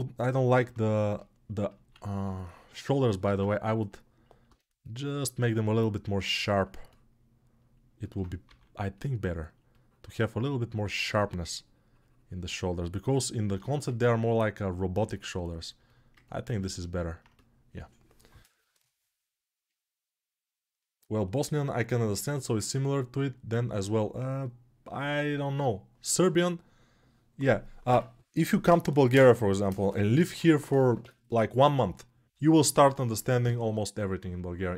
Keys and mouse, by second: 3.0 ctrl+Tab, 4.2 1, 5.1-34.7 shift+drag.